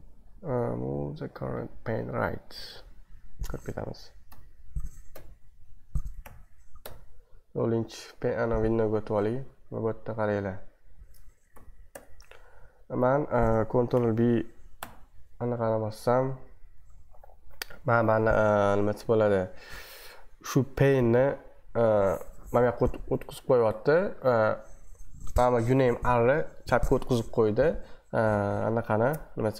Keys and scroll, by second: 2.6 super+1, 4.3 b, 5.1 1, 6.2 ctrl+b, 6.5-7.3 typing, 11.6 ctrl+b, 11.9 Left, 13.9 ctrl+b, 14.8 shift+[.